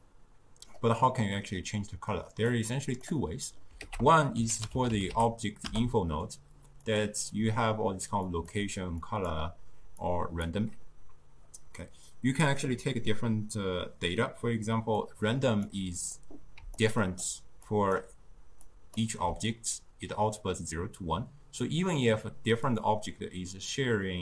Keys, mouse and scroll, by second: 0.1-1.1 drag, 1.1-2.4 middle drag, 2.4 click, 2.7-3.3 drag, 3.3 middle click, 3.8 ctrl+a, 8.3-13.1 drag, 15.0-16.6 drag, 16.6 d, 16.9 click, 17.3 d, 17.7 click, 18.0-18.6 d, 18.7 drag, 19.0 d.